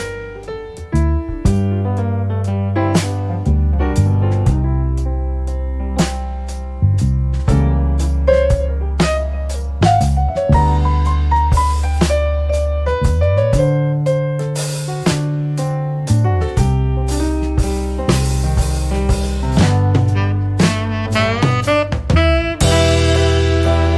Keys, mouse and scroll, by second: 0.3-3.1 drag, 4.0 click, 5.8 click, 7.7-9.5 drag, 9.7-13.9 drag, 13.9-15.0 scroll up 1, 15.0 scroll down 1, 15.1 scroll up 1, 15.7-16.2 scroll down 2, 17.5-17.9 scroll down 2, 18.3-18.9 scroll up 2, 19.4-20.0 scroll down 2, 22.0 click, 23.0 click.